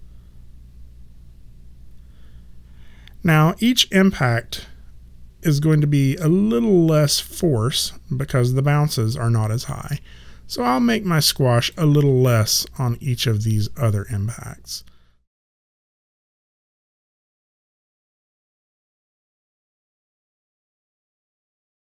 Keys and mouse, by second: 13.5 click, 14.6 ctrl+middle click, 15.2 click, 15.5 ctrl+middle click, 17.2 click, 18.0 ctrl+middle click, 19.8 click, 20.5 ctrl+middle click, 21.5 click.